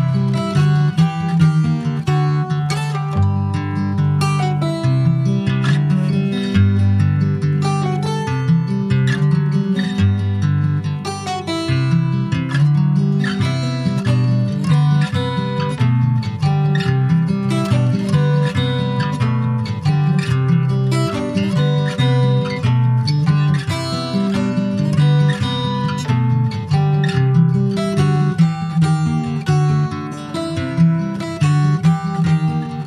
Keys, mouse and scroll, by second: 0.1 3, 0.4 click, 1.2 alt+shift+click, 1.6 alt+shift+click, 2.3 middle click, 2.8 e, 3.1 alt+s, 5.9 middle click, 6.0-6.5 scroll up 2, 6.8 2, 7.1 click, 7.7 alt+shift+click, 8.5 ctrl+b, 10.2 Tab, 10.4 click, 10.7 scroll down 3, 10.9 middle click, 11.4 ctrl+s, 11.6 scroll down 1, 11.7 alt+middle click, 12.9 ctrl+s, 13.3 click, 15.4-16.8 right drag, 16.8 click, 17.4 click, 18.1 shift+d, 19.1 click, 21.9 click, 22.6-23.7 middle drag, 23.7 ctrl+s, 23.9 click, 24.4 shift+click, 24.9 shift+click, 25.9 ctrl+j, 26.1 ctrl+click, 26.5 middle click, 26.9 ctrl+a, 27.9 click, 28.9 click, 29.5 middle click, 30.2 scroll up 1, 30.4 ctrl+s, 30.5 middle click, 31.0-31.3 scroll up 1, 31.3-32.3 shift+middle drag, 32.3 scroll down 1, 32.6-32.8 shift+middle drag.